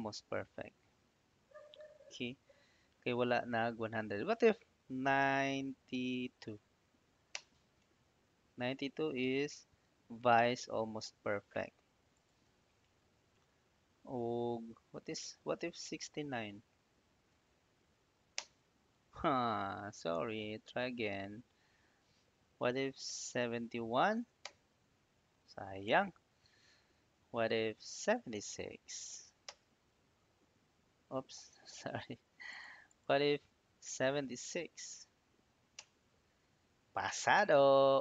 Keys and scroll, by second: 0.6 Up, 6.1 9, 6.4 2, 7.2 Return, 8.5 Right, 9.3 Left, 10.5 Right, 10.7 Left, 16.9-17.8 typing, 18.2 Return, 21.3 Up, 23.2 7, 23.8 1, 24.3 Return, 28.5 7, 28.9 6, 29.3 Return, 31.4 ctrl+z, 34.6 7, 35.1 6, 35.6 Return.